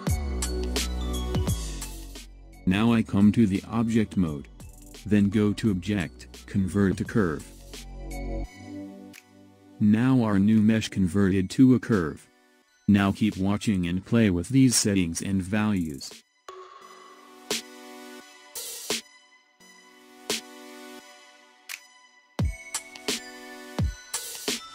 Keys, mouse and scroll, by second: 1.2-2.4 shift+middle drag, 2.4 Tab, 4.6-7.6 drag, 11.4 click, 13.5 scroll down 8, 15.3-23.0 drag, 23.2-24.7 drag.